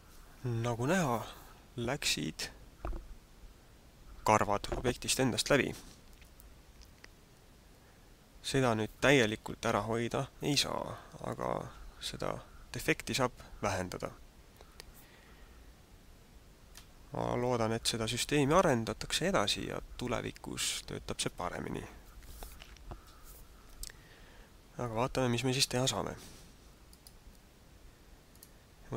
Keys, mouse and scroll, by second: 26.9 right click, 28.4 right click.